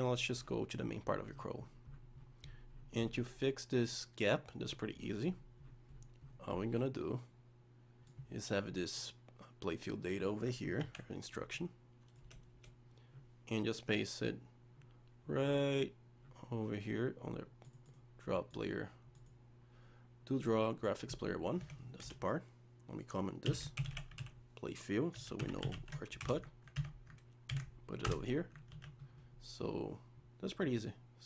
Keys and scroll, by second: 10.8 ctrl+x, 27.5 ctrl+v, 28.7 ctrl+s.